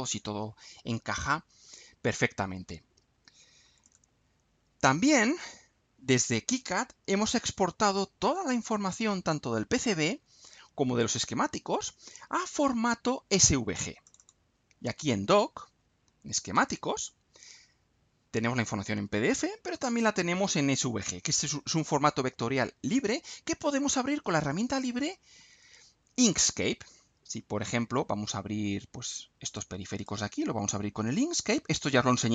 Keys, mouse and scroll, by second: 1.4-2.1 scroll down 4, 3.8 click, 5.3 click, 14.0 click, 16.5 click, 19.7 click, 29.4 click, 29.9-32.3 right drag.